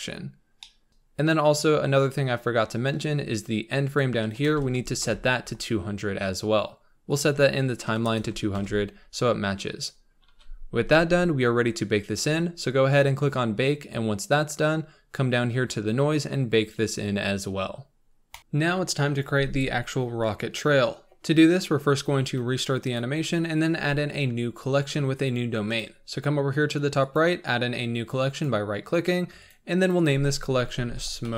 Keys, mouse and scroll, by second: 0.6 middle click, 1.0 scroll up 3, 18.4-23.0 middle drag, 23.0-27.1 drag, 27.1-29.9 right drag, 30.0-31.3 drag.